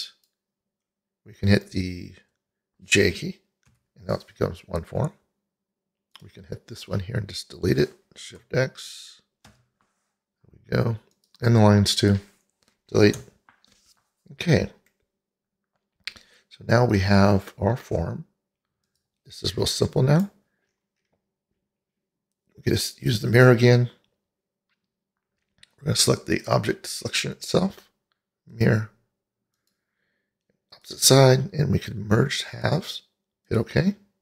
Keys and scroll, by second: 3.8 j, 9.5 shift+x, 13.4 Delete.